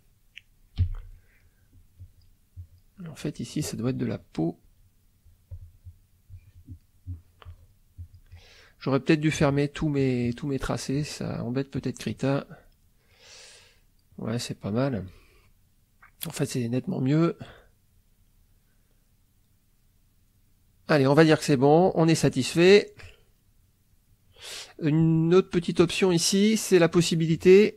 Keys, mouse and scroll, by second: 0.8 b, 1.4 middle click, 2.0 click, 2.5 click, 3.0 middle click, 4.2 click, 4.6 click, 5.2 click, 6.3 click, 6.8 middle click, 7.5 click, 8.0 click, 11.7 click, 13.2 middle click, 13.7-15.5 middle drag, 15.6 middle click, 16.4-17.6 drag, 17.7 middle click, 18.2 click, 19.1 middle click, 19.8 middle click, 20.6 middle click, 23.4 middle click, 25.8 click.